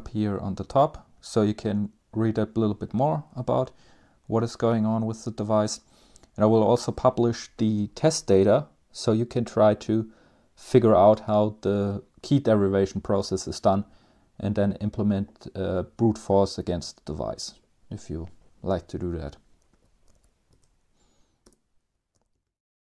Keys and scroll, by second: 0.0 Page_Down, 0.1 Page_Down, 0.3 Page_Down, 0.7 Page_Down, 1.0 Page_Down, 1.3 Page_Up, 4.3 Page_Up, 4.5 Page_Up, 5.0 Page_Up, 5.4 Page_Down, 5.6 Page_Down, 5.8 Page_Down, 19.8-20.5 typing, 21.0 Return, 21.8 typing.